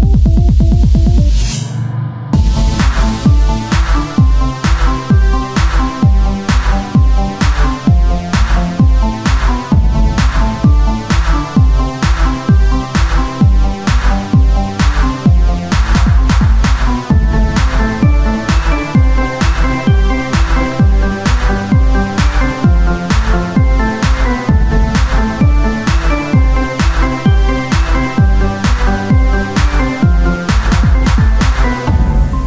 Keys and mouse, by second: 10.7 s, 14.6-17.8 drag, 20.7-21.9 drag.